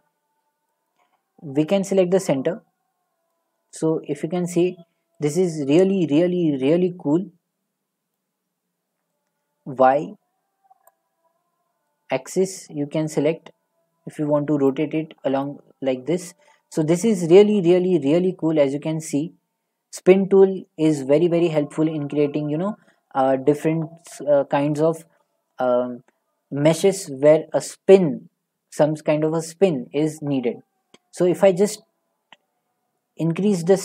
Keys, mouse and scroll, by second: 0.7-3.5 drag, 3.7 middle click, 3.7 middle click, 4.1 middle click, 4.5 middle click, 6.6 scroll, 7.0 middle click, 8.5-10.5 drag, 10.9-14.1 drag, 14.7-15.8 drag, 14.7 middle click, 16.4-17.8 drag, 20.1 middle click, 21.6 middle click, 23.3 middle click, 33.2-33.8 drag.